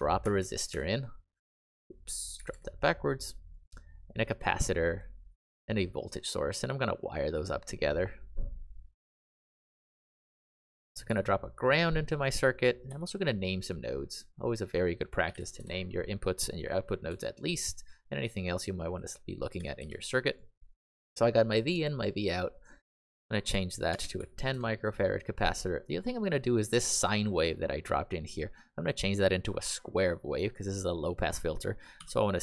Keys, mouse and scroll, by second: 0.0-0.6 typing, 0.9 click, 2.3 r, 2.4 r, 4.1 click, 5.9 click, 11.0 g, 11.9 click, 12.8 n, 13.6 click, 15.0-15.8 typing, 17.0 n, 18.4 click, 19.3-20.2 typing, 20.3 click, 22.0-24.6 typing, 26.7 typing, 30.5 click, 31.9 h.